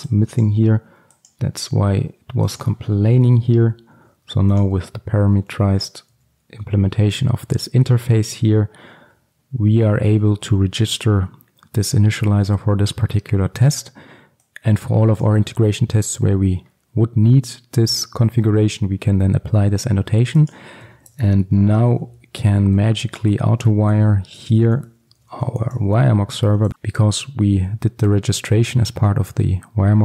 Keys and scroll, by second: 3.2 ctrl+alt+super+l, 4.6 ctrl+b, 5.9 alt+1, 9.7 alt+1, 9.9 ctrl+alt+Left, 23.5 Return.